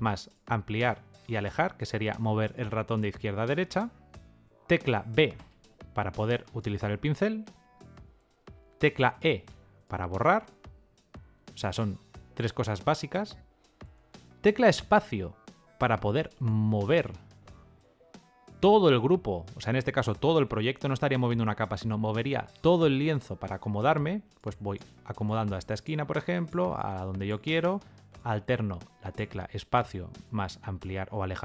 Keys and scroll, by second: 4.7 b, 8.5 e, 14.4 space, 29.4 space.